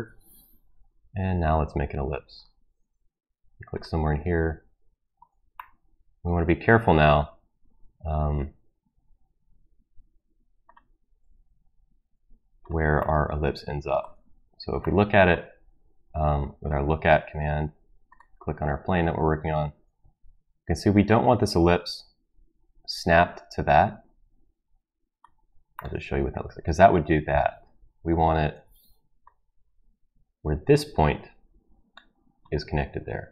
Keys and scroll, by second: 20.0 Escape, 28.1 ctrl+z.